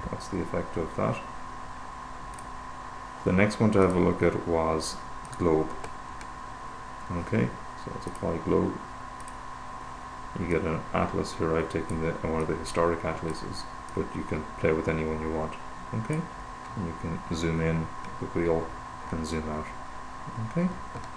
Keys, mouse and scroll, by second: 2.8 click, 4.3 click, 5.8 click, 8.6 click, 9.6 click, 9.9 click, 10.9-13.8 drag, 14.8 click, 16.0 click, 16.9-17.6 scroll up 2, 17.8-18.6 scroll up 2, 18.6-19.1 scroll up 1, 19.1-20.1 scroll down 2, 20.1-20.6 scroll down 1.